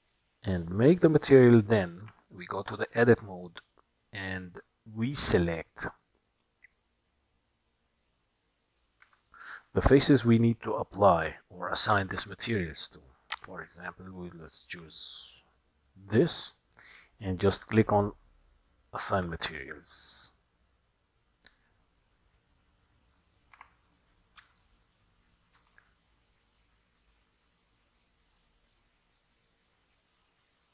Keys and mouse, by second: 2.3 Tab, 6.4 click, 9.1 KP_1, 11.0-12.0 shift+middle drag, 13.3-16.1 drag, 18.7 click, 23.7 Tab, 25.1-26.5 middle drag, 29.8-30.7 drag.